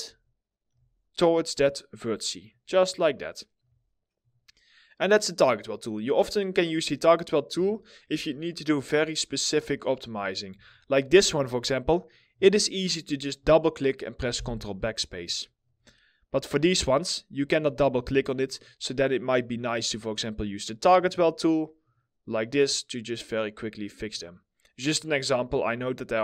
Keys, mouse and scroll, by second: 2.5 alt+middle click, 4.9-5.3 scroll down 1, 5.3 middle click, 6.4 scroll up 1, 7.0-7.5 scroll, 7.5 scroll down 1, 7.8 alt+middle click, 8.8 middle click, 9.2 alt+middle click, 10.0 2, 11.6 double click, 14.9 alt+middle click, 15.3 middle click, 15.3-16.2 alt+scroll up 2, 16.2 double click, 17.5 1, 22.4 middle click.